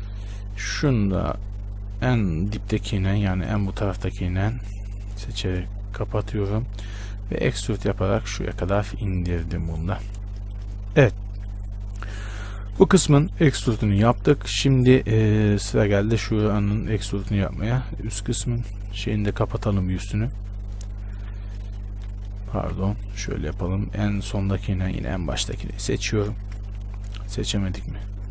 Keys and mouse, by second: 1.1-7.6 right drag, 6.1 f, 7.6 e, 9.1 Tab, 10.1 a, 17.6 Tab, 18.2-22.4 middle drag, 21.4 f, 22.8 ctrl+z.